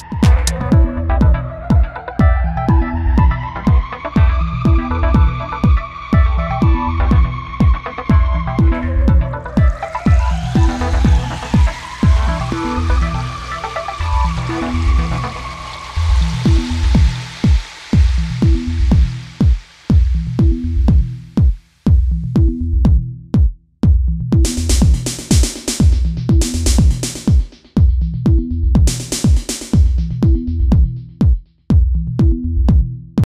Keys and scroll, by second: 1.6 v, 9.2 space, 10.5 f, 10.9 space, 14.2 space.